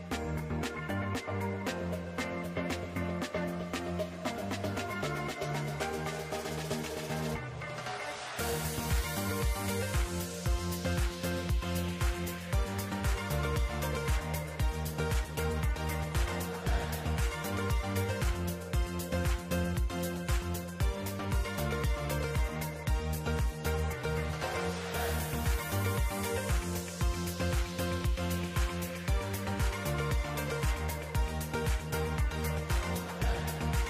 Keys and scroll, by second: 10.6 alt+x, 15.3 ctrl+alt+Delete, 28.2 alt+Tab.